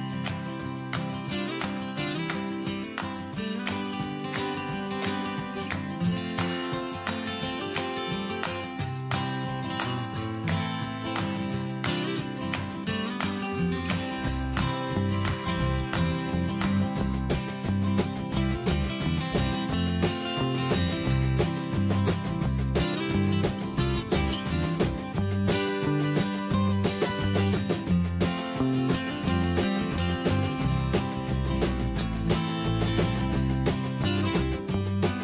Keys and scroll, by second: 14.5 ctrl+z, 27.7 ctrl+space.